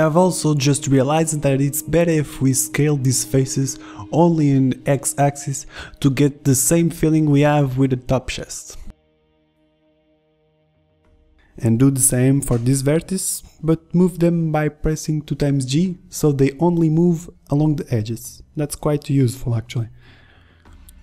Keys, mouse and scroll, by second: 1.2 ctrl+z, 2.0 s, 3.8 s, 6.4-7.5 middle drag, 8.0 Tab, 10.0 Tab, 12.2 g, 13.8 middle click, 14.1 ctrl+z, 14.3 ctrl+z, 14.7 g, 16.1 click, 16.3 g.